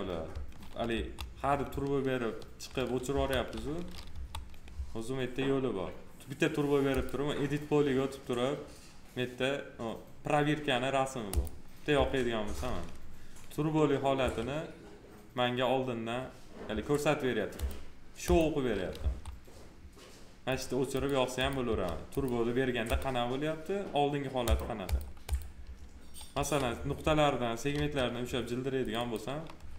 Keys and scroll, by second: 0.9 F4, 3.0 F4, 11.9 F4, 14.2 1, 16.6 1, 18.9 F4, 21.6 F4, 26.3 1, 27.7 2.